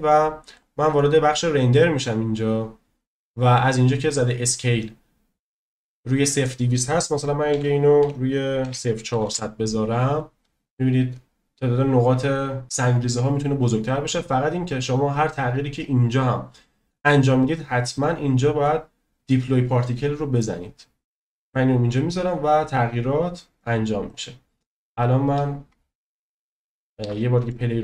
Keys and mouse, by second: 0.5 click, 6.4-10.5 drag, 9.2 0, 21.2 click, 24.0 click, 26.1 shift+middle drag, 27.0 space, 27.5-27.8 shift+middle drag.